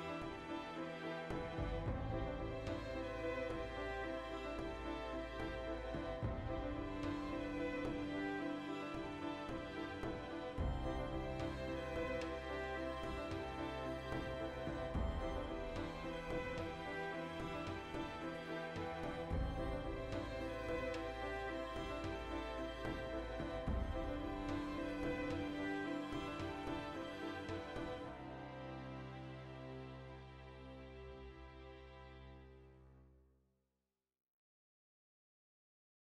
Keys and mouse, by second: 1.0 ctrl+r, 1.5 right click, 1.7-2.8 middle drag, 2.8 right click, 3.2 g, 3.8 click, 3.9-5.9 ctrl+middle drag, 5.9 right click, 6.1 l, 6.2-7.6 ctrl+middle drag, 7.0 alt+e, 8.3 click, 9.0 middle click, 9.8 ctrl+r, 11.3 click, 11.5 ctrl+r, 12.3 click, 12.5 ctrl+r, 13.0 click, 13.1-14.8 middle drag, 14.0 ctrl+r, 14.8 click, 15.3-17.4 middle drag, 16.7 ctrl+r, 17.4 click, 17.5 ctrl+r, 18.0 click, 18.1-19.4 middle drag, 18.5 ctrl+r, 19.4 right click, 19.5-20.8 middle drag, 20.8 ctrl+r, 22.3 click, 22.6 middle click, 22.8 Tab, 23.1 ctrl+middle click, 23.3 middle click, 24.2 alt+q, 25.2 middle drag, 25.2 z, 25.5 right click, 26.0 z, 26.2-27.5 shift+middle drag, 26.5 z, 27.0 Tab, 27.5-28.1 right drag, 28.5 g, 29.2 shift+right click, 29.6 g, 30.4 click, 30.5-33.0 middle drag, 31.3 alt+q, 32.4 g, 33.0 click, 33.1-36.1 middle drag, 35.8 alt+o.